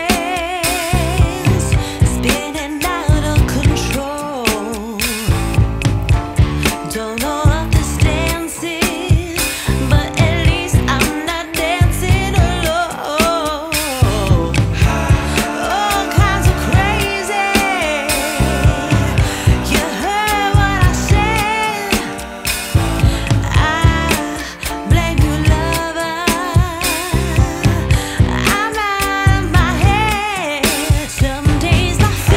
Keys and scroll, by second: 0.9 b, 3.4 [, 4.7 [, 16.4 space, 22.7 space, 30.9 space.